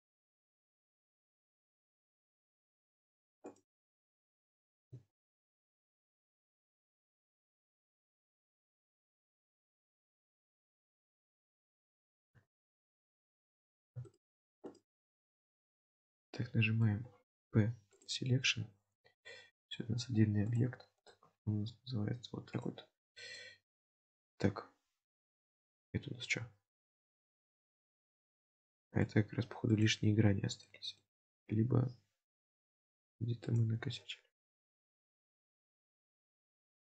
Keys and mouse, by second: 1.6 alt+shift+click, 2.6 alt+shift+click, 4.1 middle click, 5.3 alt+shift+click, 6.6 alt+shift+click, 8.2 alt+shift+click, 9.1 alt+shift+click, 10.2 alt+shift+click, 11.2-12.3 middle drag, 13.3 alt+shift+click, 14.1 shift+click, 14.7 shift+click, 16.0 middle click, 19.0 Tab, 20.5 click, 22.6 click, 23.4-26.9 middle drag, 27.8-29.1 middle drag, 30.7-31.0 middle drag, 32.7 click, 33.5 click, 34.5-35.0 middle drag, 35.5-36.9 middle drag.